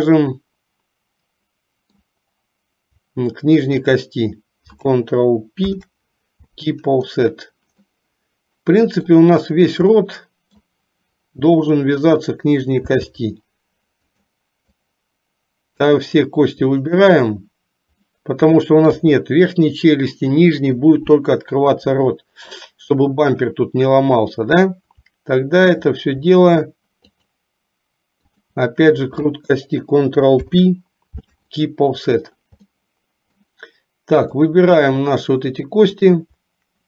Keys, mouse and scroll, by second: 3.8 shift+click, 5.7 ctrl+p, 8.0-9.3 middle drag, 10.1 middle click, 18.1-19.2 middle drag, 19.2 KP_3, 27.2 shift+click, 28.3 shift+click, 30.5 ctrl+p, 32.9 middle click.